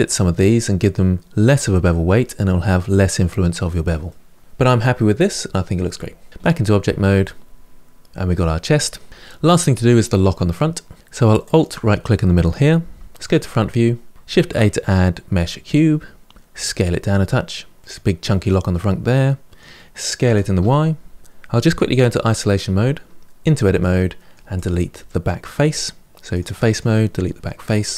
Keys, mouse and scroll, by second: 3.9-6.3 middle drag, 6.3-6.6 scroll down 2, 6.6-9.1 middle drag, 9.6-10.9 middle drag, 11.2 shift+right click, 11.9-12.9 middle drag, 12.9 KP_1, 13.8-16.0 scroll up 3, 16.0 shift+a, 16.3 s, 18.5-20.0 middle drag, 20.0 s, 21.7 KP_Divide, 23.2 Tab, 23.6 middle click, 24.3 click, 26.1 click, 26.5 click, 27.6 Delete.